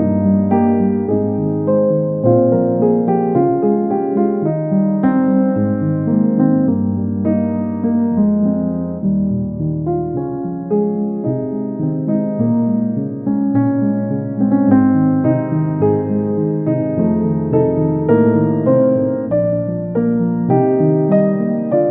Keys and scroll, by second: 1.2 ctrl+a, 3.3 ctrl+a, 4.2 ctrl+c, 5.0 ctrl+v, 8.2 ctrl+v, 11.0 space, 11.5 ctrl+v, 15.0 ctrl+z.